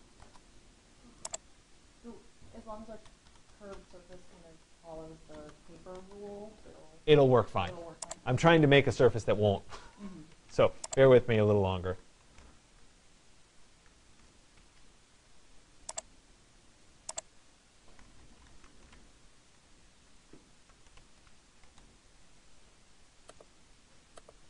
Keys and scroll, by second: 0.7 Return, 19.3 BackSpace.